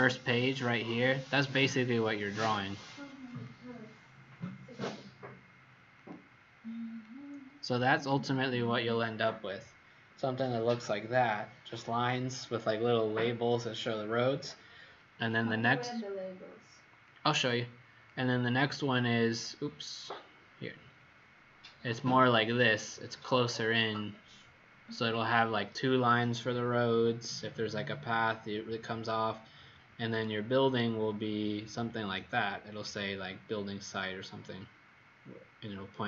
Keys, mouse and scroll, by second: 3.2 click, 19.1-20.2 scroll up 1, 20.8-25.5 scroll up 75, 30.2-30.8 scroll up 2, 30.8-32.1 scroll up 16, 32.1-33.5 scroll up 9.